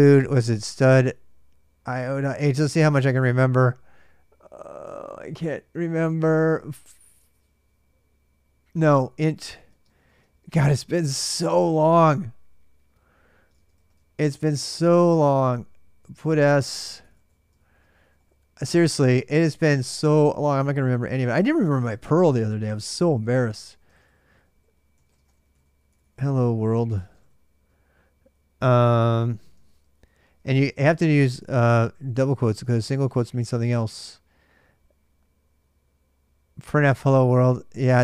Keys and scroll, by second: 0.0-3.4 typing, 5.8-34.0 typing.